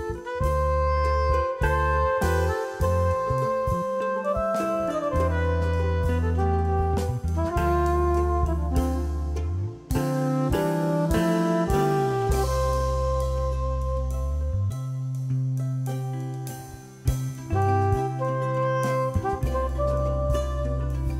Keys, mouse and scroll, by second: 1.2 z, 1.4-5.9 drag, 5.9 space, 6.4 click, 6.8-7.3 scroll down 2, 7.3 click, 13.2 space, 13.6 click, 14.3 shift+click, 15.1-16.0 typing, 16.0 click, 17.0 ctrl+x, 17.5 click, 19.5 F4.